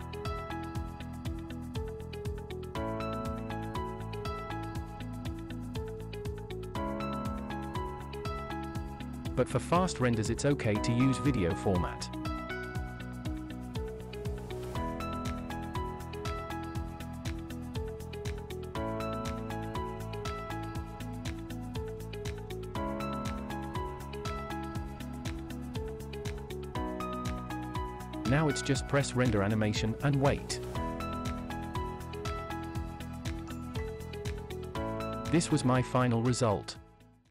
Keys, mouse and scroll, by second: 1.9 click, 2.9-4.9 scroll down 3, 8.5-12.3 drag, 13.3-14.3 scroll down 2, 14.3 drag, 14.6-16.5 scroll down 2, 17.4 click, 19.4-20.7 drag, 21.2-22.1 scroll down 2, 22.1 click, 22.8 click, 24.1-25.7 drag, 29.6-37.3 drag.